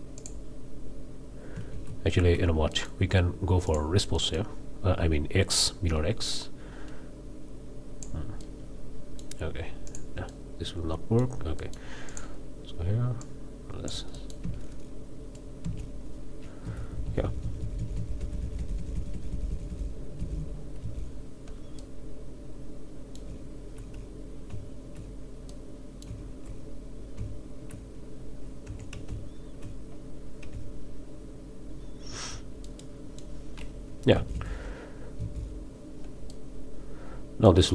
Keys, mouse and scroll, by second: 0.2 drag, 1.7 ctrl+z, 2.7 ctrl+click, 3.7 click, 4.1-4.5 drag, 5.5-8.2 drag, 8.4 click, 9.0 middle click, 9.9 middle click, 10.3-11.4 middle drag, 11.6 middle click, 12.1-12.4 middle drag, 13.2 click, 14.1-14.5 middle drag, 14.4 space, 15.6 space, 16.6 Left, 18.2 Right, 20.8 Left, 21.8-23.4 middle drag, 23.3 z, 24.5 z, 25.5-26.2 middle drag, 26.2 z, 27.2 z, 28.7 Tab, 29.1 z, 30.5 z, 32.6-33.4 middle drag, 34.1 Right, 35.2 Left, 36.3-37.7 drag.